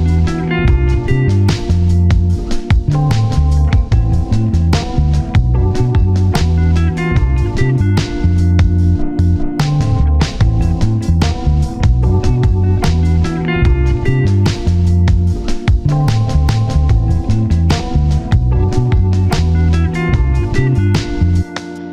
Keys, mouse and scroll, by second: 0.3 middle click, 0.4-1.2 scroll up 2, 0.7 middle click, 1.2-1.8 scroll down 2, 1.3 middle click, 1.8 a, 3.0 typing, 3.7 middle click, 3.8-4.4 scroll up 1, 4.4 scroll down 1, 4.5 middle click, 5.2-8.2 typing, 7.4 scroll down 1, 9.0 middle click, 10.8 middle click, 11.5 d, 12.4 middle click, 16.1 scroll down 1, 16.2-17.2 scroll up 2, 16.4 middle click, 17.2-17.6 typing, 17.8 Return, 20.5 ctrl+right click, 20.9-21.2 scroll down 1, 21.2 middle click.